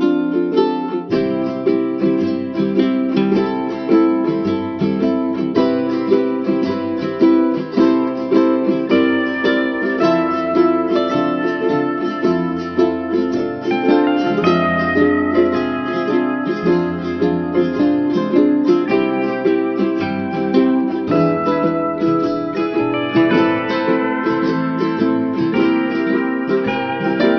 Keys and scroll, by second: 9.7 ctrl+alt+shift+n.